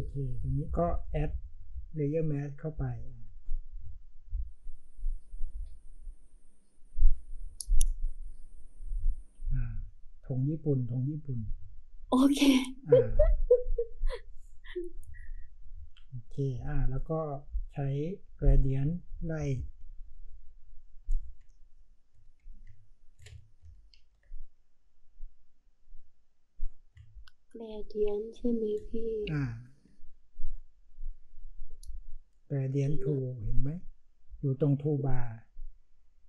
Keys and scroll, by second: 23.6 ctrl+alt+shift+r, 23.9 ctrl+t, 29.2 Return.